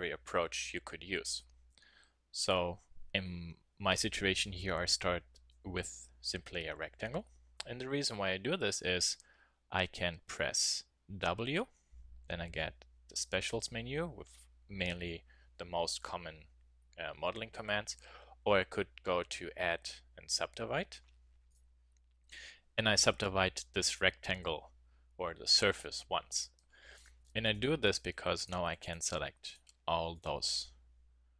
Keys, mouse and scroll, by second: 3.4 Tab, 11.7 w, 21.5-23.3 drag, 26.9-31.3 drag.